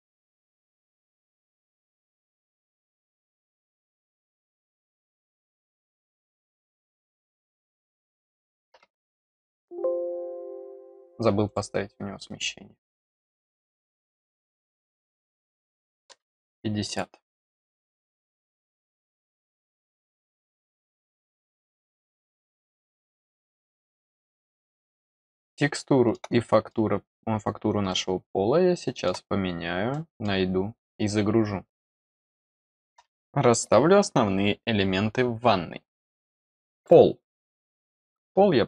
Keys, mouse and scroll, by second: 1.3 click, 1.8 click, 2.4 middle click, 3.1 click, 3.8 click, 5.3 click, 5.8 click, 6.2 middle click, 7.1 click, 7.5 click, 8.0 click, 9.3 click, 11.4 click, 12.8 click, 14.1 middle click, 14.8 click, 16.8 click, 19.6 click, 22.3 click, 22.5 click, 23.6 scroll down 1, 24.1 middle click, 24.7 scroll up 1, 25.4 middle click, 26.4 middle click, 27.8-29.0 middle drag, 29.8 middle click, 36.7 click, 37.6 click, 37.7 click.